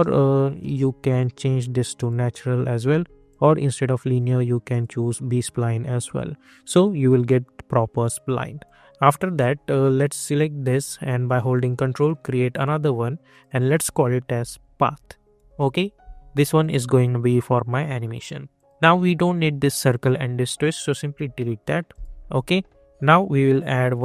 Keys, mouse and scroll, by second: 0.6 ctrl+z, 1.0 click, 2.9 ctrl+z, 3.2 click, 6.0 click, 6.4 scroll up 1, 8.1 click, 8.6-9.9 alt+drag, 11.5-13.3 ctrl+drag, 14.1-15.4 typing, 15.4 Return, 16.6 click, 21.9-24.0 drag.